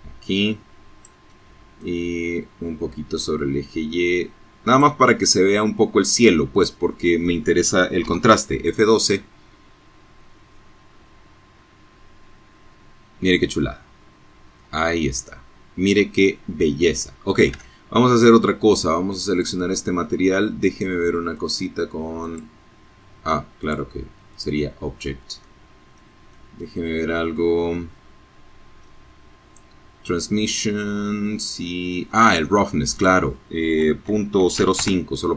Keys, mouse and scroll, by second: 3.4-4.9 drag, 6.2 F12, 11.6-11.9 scroll down 2, 12.7-13.2 scroll up 2, 13.8 scroll down 2, 15.7 alt+Tab, 17.2 click, 19.4 click, 20.3 click, 21.7 click, 22.5 click, 23.5-27.1 middle drag, 29.7 middle click, 31.1 middle click, 32.2 KP_Decimal, 32.5 KP_0, 32.7 KP_5, 32.9 KP_Enter, 34.4 F12.